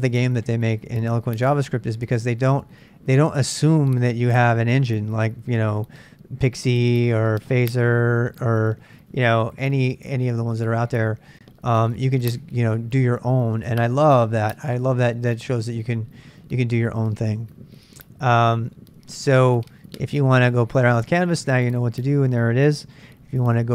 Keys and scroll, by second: 23.3 super+Tab.